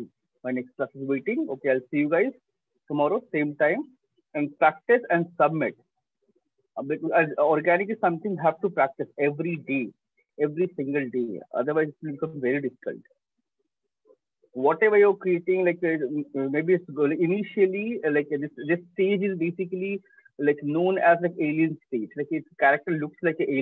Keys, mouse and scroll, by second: 0.3 click, 2.6-7.5 drag, 13.6-18.6 drag, 18.7 click.